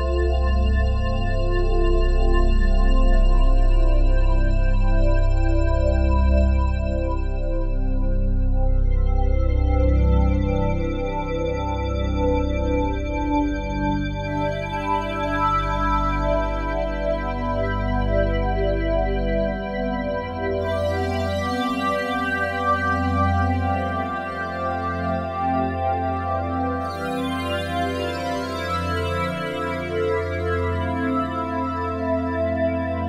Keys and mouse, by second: 2.3 click, 3.2 click, 4.0 click, 4.5-10.6 alt+shift+drag, 10.6 g, 11.0 x, 11.7 Escape, 12.3 alt+click, 13.4 alt+click, 14.5 click, 15.5 click, 16.4 g, 16.7 x, 18.1 click, 18.5 alt+click, 19.9 x, 20.4 ctrl+alt+click, 21.0 click, 22.8 click, 23.5 click, 25.8-33.0 drag.